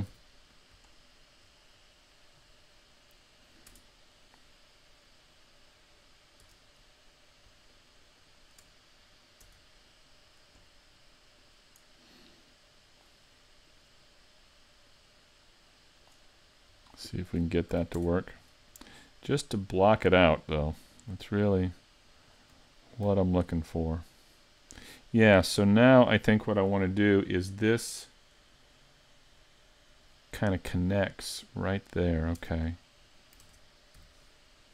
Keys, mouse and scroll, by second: 0.1 z, 0.5-0.9 scroll up 2, 0.9 shift+middle click, 3.7 Tab, 6.4 Tab, 7.7 shift+click, 8.2 shift+click, 9.5 Tab, 11.4 right click, 12.4 click, 13.7 right click, 14.9 click, 16.8 scroll down 2, 17.3-17.8 scroll down 1, 17.8 a, 18.0 Tab, 18.5 middle click, 21.7 shift+click, 22.2 shift+click, 22.6-23.1 scroll down 4, 23.1 z, 23.6 middle click, 24.9 scroll up 3, 25.6 middle click, 28.4 scroll up 1, 28.8 middle click, 30.8 middle click, 31.9 middle click, 32.4 Tab, 32.7-33.4 scroll up 2, 33.4 ctrl+Tab, 34.6 right click.